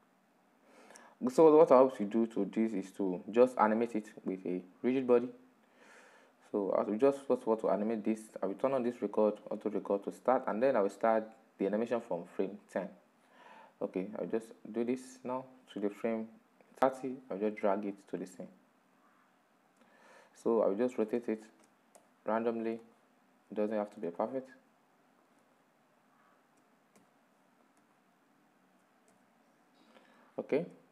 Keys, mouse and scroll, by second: 4.6-7.8 drag, 8.9 click, 12.4-19.6 drag, 19.6-20.2 middle drag, 20.2-20.6 scroll up 6, 20.9-21.6 shift+middle drag, 21.6 r, 22.6-23.6 middle drag, 23.6 r, 25.2-26.6 middle drag, 26.6 r, 27.5-28.7 middle drag, 28.7 r, 30.0-30.4 middle drag, 30.4-30.8 scroll down 5, 30.8-30.9 middle drag.